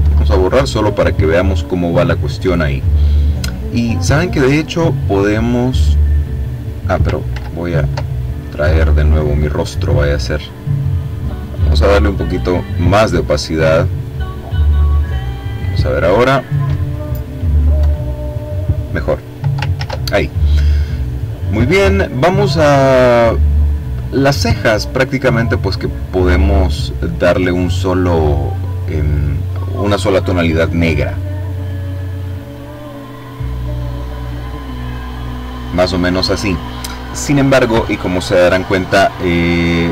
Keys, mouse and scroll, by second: 0.0 Delete, 4.0 click, 5.1 click, 7.2 ctrl+z, 9.1 click, 11.0-12.9 drag, 13.6-14.6 drag, 16.1 click, 16.8 click, 17.7 Delete, 19.7 ctrl+z, 22.6 click, 23.8 click, 25.0 click, 26.0 click, 27.3 click, 31.5 click, 33.3 click, 34.6 click.